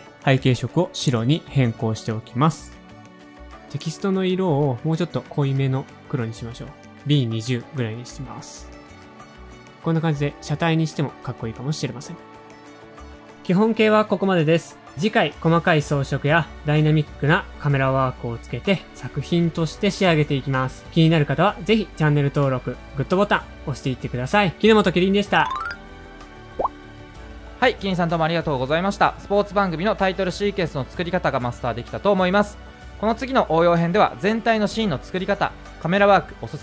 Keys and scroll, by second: 7.9 shift+Down, 8.3 Return, 33.7 Right, 33.9 Up, 34.1 Down, 34.3 Left, 35.5 BackSpace, 35.7 shift+z.